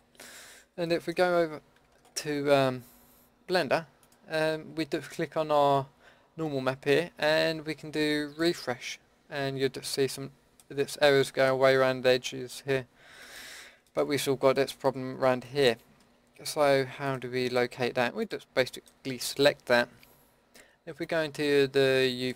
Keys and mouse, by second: 0.9-14.0 drag, 15.1 Tab, 15.6-17.0 drag, 22.1-22.3 drag.